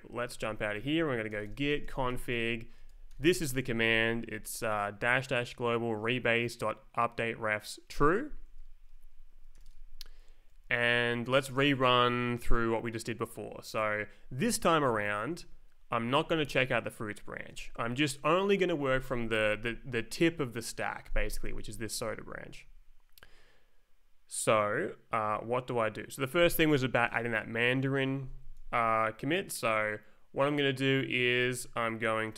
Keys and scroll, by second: 0.1 Up, 0.3-3.8 typing, 8.6 Return, 9.5 l, 9.6 Return, 10.7 Right, 11.3 Right, 11.7 Down, 14.8 Left, 15.3 Down, 17.5 Up, 18.7 Right, 19.2 Up, 21.4 Left, 22.0 Right, 22.3 Down.